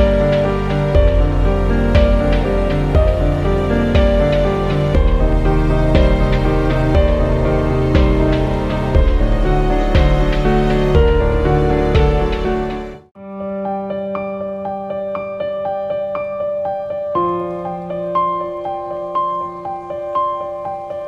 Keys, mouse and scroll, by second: 0.0 ctrl+t, 1.4-10.9 drag, 10.9 click, 11.7 scroll down 1, 13.1 click, 13.1 click, 14.8-16.9 typing, 17.8 click.